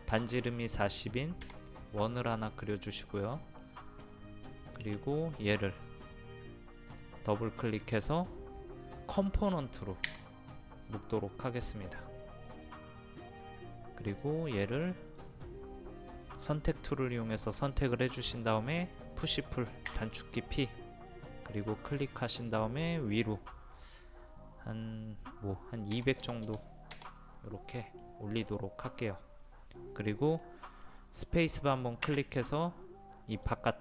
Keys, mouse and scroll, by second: 0.1 KP_0, 3.6 middle click, 4.1-4.5 scroll up 1, 5.8 click, 10.1 w, 12.5 click, 19.9 p, 20.6 click, 25.9 KP_2, 26.2 KP_0, 28.1 middle click, 28.5-28.8 scroll down 1, 30.9 middle click, 32.3 space, 33.3-33.8 drag.